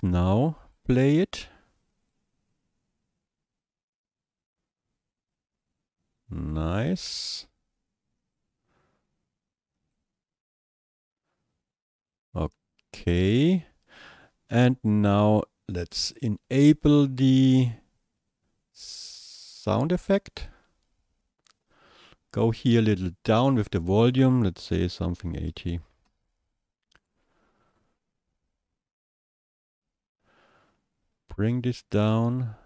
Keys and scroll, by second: 25.3 KP_8, 25.5 KP_0, 26.1 Return.